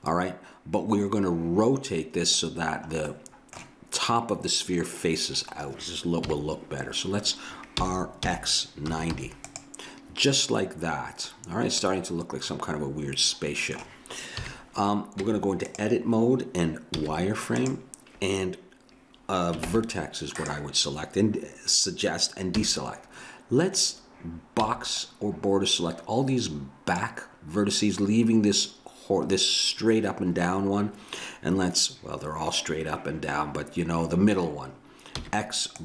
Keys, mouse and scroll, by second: 3.1-5.6 middle drag, 6.2 KP_3, 7.7 r, 11.9-13.4 middle drag, 14.4 KP_3, 15.2 Tab, 17.0 z, 19.7 ctrl+Tab, 22.5 a, 24.7 b, 35.2 x.